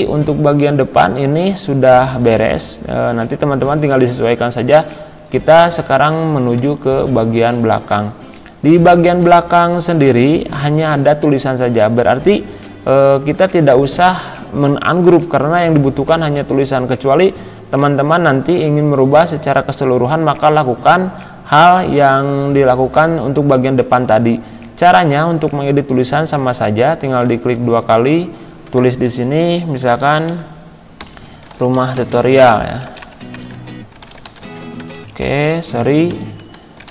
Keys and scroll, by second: 6.6 space, 29.5 Caps_Lock, 29.6-32.5 typing, 33.5 Caps_Lock, 33.7-34.9 typing, 35.9 Caps_Lock, 36.1-36.9 typing.